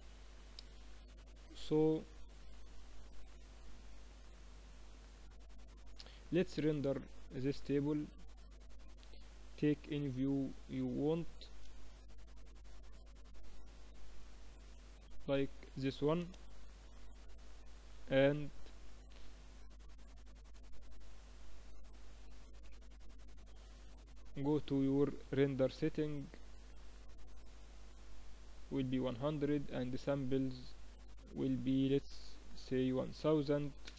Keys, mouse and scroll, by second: 6.0 ctrl+s, 7.0 click, 11.2-13.3 middle drag, 18.0-20.8 middle drag, 22.4 ctrl+s, 24.1-26.0 drag, 26.4-32.9 drag, 32.4 0.